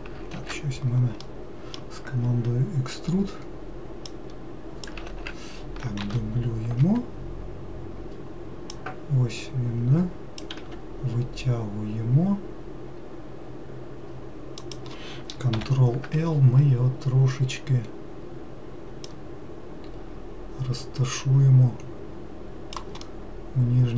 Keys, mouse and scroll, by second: 0.7 ctrl+z, 1.5-4.3 middle drag, 4.3 click, 5.3 ctrl+z, 6.3 shift+d, 9.0 click, 10.9 e, 15.8 ctrl+l, 19.3 click, 23.3-23.9 middle drag.